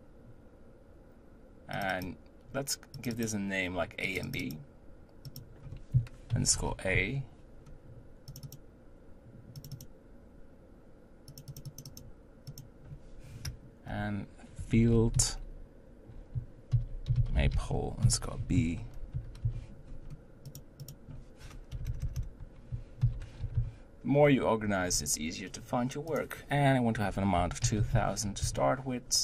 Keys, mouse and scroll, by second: 2.2-2.8 drag, 3.4 click, 4.5-7.6 drag, 8.8 click, 10.1-10.6 drag, 11.8-21.9 drag, 21.9 BackSpace, 22.0 BackSpace, 26.1-27.8 drag, 27.8 0, 27.9 0.